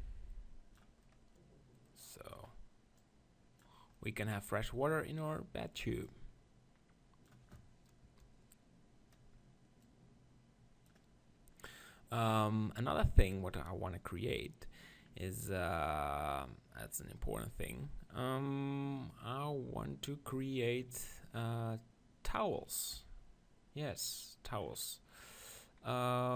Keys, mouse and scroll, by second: 1.0 middle click, 3.0-5.1 drag, 6.0-8.0 drag, 8.0 KP_0, 9.8-11.6 drag, 11.6-22.6 middle drag, 22.9 KP_7, 24.6-26.3 middle drag.